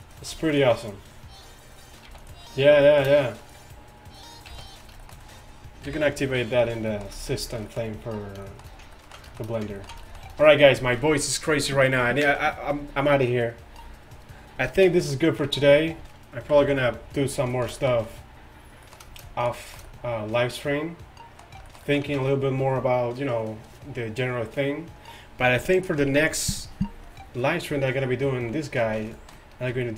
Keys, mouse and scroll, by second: 0.1 click, 0.3 c, 0.9-1.9 middle drag, 1.9 right click, 2.1 x, 2.6 drag, 2.6-2.9 middle drag, 3.5 click, 3.5 middle click, 4.5 x, 5.9 KP_1, 15.0-15.4 middle drag, 15.8 middle click, 16.6 KP_5, 20.1-22.0 middle drag, 28.5 z, 28.9 z.